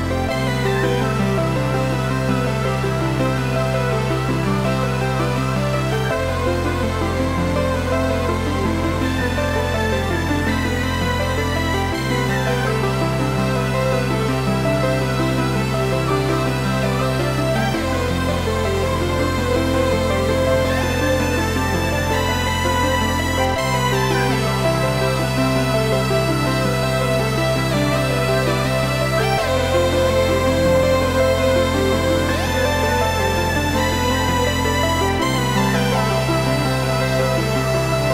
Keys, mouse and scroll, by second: 0.8 click, 1.0-5.7 middle drag, 1.4-1.7 scroll down 2, 3.5 scroll down 2, 5.0-5.7 scroll up 2, 5.7 Tab, 6.2 click, 8.0 KP_7, 8.6 shift+z, 9.0 shift+d, 11.1 Return, 11.4 g, 12.4 click, 12.7-14.1 middle drag, 13.0-13.4 scroll down 1, 13.4 shift+z, 14.1 click, 14.3 scroll up 1, 14.9 click, 15.2 KP_Decimal, 16.5 s, 17.9 Escape, 18.2 shift+click, 18.7 s, 20.7 click, 21.1 g, 22.1 click, 22.2-23.6 middle drag, 22.8 scroll down 1, 23.6 s, 24.6 click, 25.0 scroll up 1, 25.1 middle click, 26.0 g, 27.1 click, 27.6-32.6 middle drag, 28.3 scroll down 1, 29.8 s, 32.6 click, 33.0 g, 34.2 click, 34.5 scroll down 1, 35.0 shift+d, 37.5 click, 37.8 s.